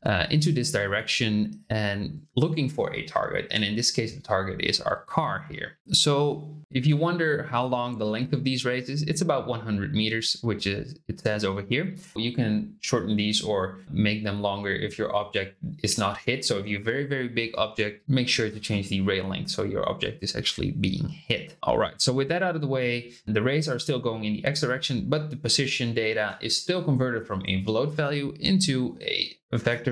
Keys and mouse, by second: 5.7 ctrl+z.